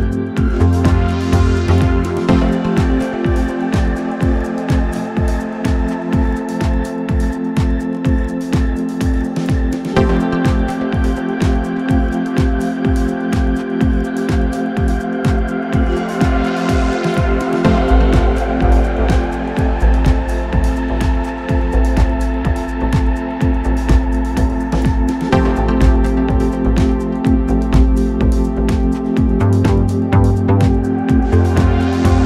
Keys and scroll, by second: 0.1 ctrl+z, 0.4 ctrl+d, 0.7 Escape, 3.9 ctrl+z, 10.0 ctrl+z, 10.5 Delete, 11.2 Delete, 13.3 ctrl+d, 13.4 Escape, 13.8 ., 15.9 ctrl+F1, 19.9 ctrl+d, 20.2 Escape, 21.3 ctrl+F1, 28.0 ctrl+F1, 30.3 ctrl+F1.